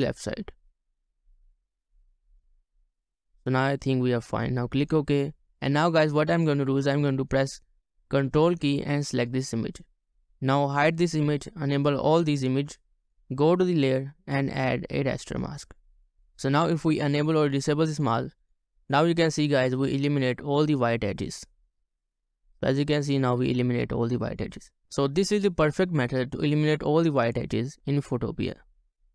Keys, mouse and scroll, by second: 9.2 ctrl+click, 16.2 shift+click, 16.9 shift+click, 20.1-20.9 ctrl+alt+scroll down 1, 21.0 ctrl+alt+scroll up 1, 22.0 scroll down 1, 23.0-24.0 ctrl+alt+scroll down 1, 24.0-24.3 ctrl+scroll down 1.